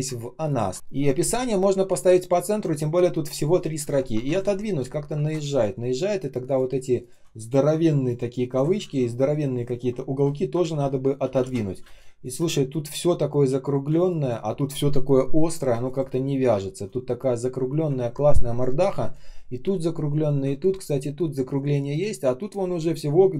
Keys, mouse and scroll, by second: 0.1 ctrl+scroll up 1, 4.2 shift+Down, 6.3 ctrl+click, 6.9 ctrl+click, 7.3 ctrl+shift+click, 8.7 ctrl+я, 10.5 shift+Down, 11.7 space, 12.2 space, 14.3 space, 15.6 space, 16.4 space, 17.9 ctrl+scroll down 1, 20.5 ctrl+scroll up 1, 21.8 ctrl+click, 22.3-23.3 ctrl+scroll up 1.